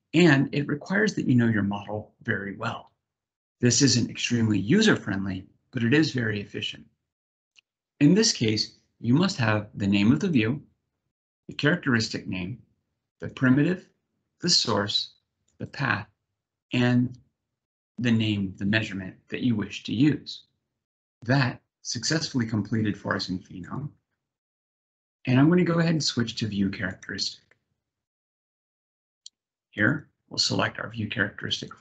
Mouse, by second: 9.9 click, 11.2 click, 13.0 click, 14.1 click, 15.1 click, 16.4 click, 23.4 click, 24.7 click, 29.6 click, 31.3 click.